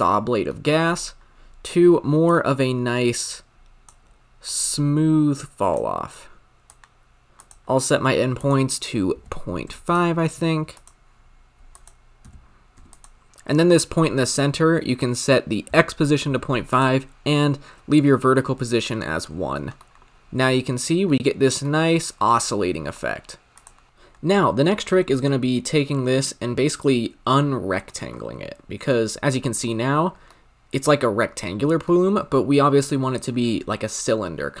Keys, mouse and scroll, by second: 3.8-7.3 drag, 7.3 scroll up 3, 7.5-9.9 drag, 10.8-13.0 drag, 16.7 click, 19.6 middle click, 20.1-21.0 scroll down 4, 21.0-21.7 middle drag, 21.7-22.2 scroll up 5, 22.2-23.5 middle drag, 23.5 click, 23.9-24.9 drag, 24.9-27.9 middle drag, 28.1-28.8 scroll up 1, 28.8-32.1 middle drag, 32.1-34.6 scroll up 3.